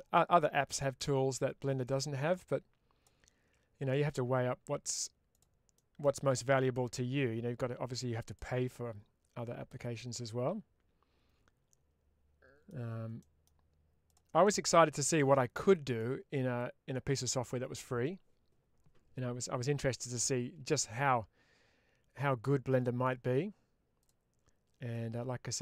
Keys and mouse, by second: 0.0 middle click, 1.7-2.9 ctrl+drag, 3.8 middle click, 5.2 click, 5.6 middle click, 6.4-8.2 ctrl+drag, 8.6-12.6 middle drag, 13.1 middle click, 14.0 click, 14.3 middle click, 14.9 click, 15.5 middle click, 16.5 click, 19.6-22.9 middle drag, 24.8-25.6 ctrl+drag.